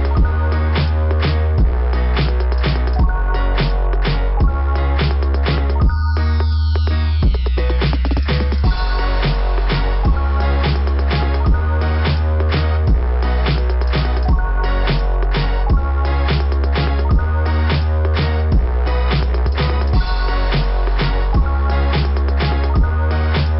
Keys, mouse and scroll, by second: 2.0 click, 2.3 click, 2.5 click, 3.2 click, 5.1 right click, 5.9 click, 7.2 click, 7.7 click, 7.9 click, 8.2 click, 9.9 click, 10.9 click, 11.6 click, 13.5 click, 14.8 click, 14.9 click, 15.7 scroll up 2, 20.0-21.3 scroll up 3, 22.6 scroll down 2.